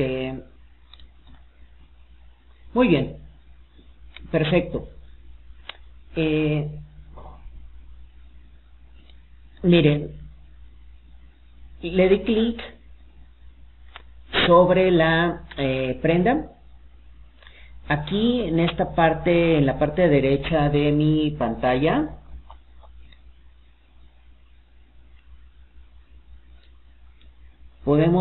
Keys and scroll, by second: 20.1 alt+d.